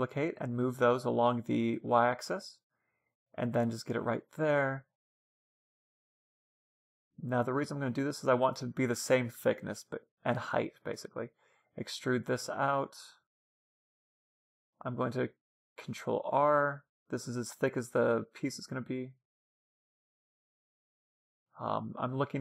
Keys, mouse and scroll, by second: 3.0-6.3 middle drag, 5.1 a, 7.3 b, 8.5 e, 12.6-14.6 middle drag, 14.7 ctrl+r, 18.9-20.6 drag, 21.1-22.4 middle drag, 22.3 ctrl+r.